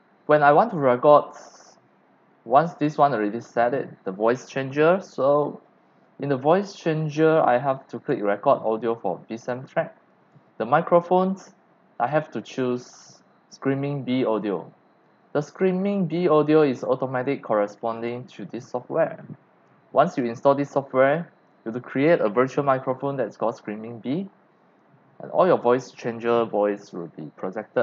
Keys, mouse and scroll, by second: 2.8 click, 7.0 click, 8.0 click, 10.1 click, 13.1-15.5 drag, 16.5 click, 17.9 click, 19.8 click, 20.5 click, 20.9 click.